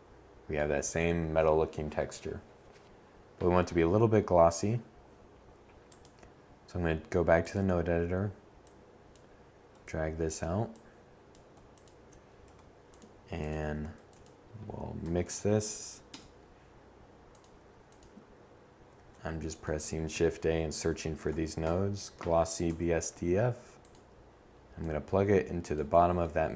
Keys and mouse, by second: 1.3-3.8 middle drag, 10.4 g, 11.6 a, 16.8 shift+a.